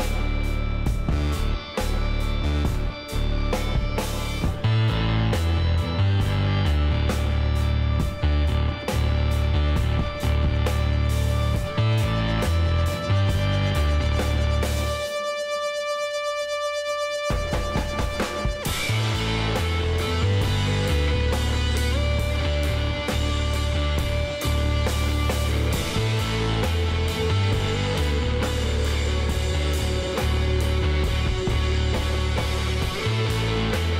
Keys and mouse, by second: 3.7-7.9 middle drag, 7.9 r, 10.7-12.8 middle drag, 13.8-16.2 middle drag, 17.0 s, 17.1-18.4 middle drag, 19.4-23.6 middle drag, 23.6 KP_1, 24.5 z, 24.7 middle click, 26.0 s, 28.4 z, 33.5 s.